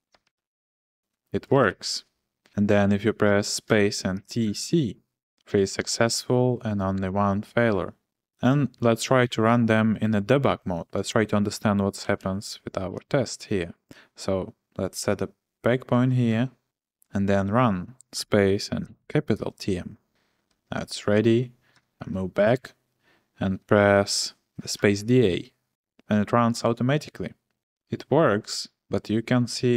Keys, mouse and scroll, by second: 0.2 shift+g, 1.4-2.3 typing, 3.9-4.9 typing, 11.8-12.8 typing, 16.3 b, 18.6-19.5 typing, 21.8 ctrl+h, 21.9 ctrl+h, 24.9 typing.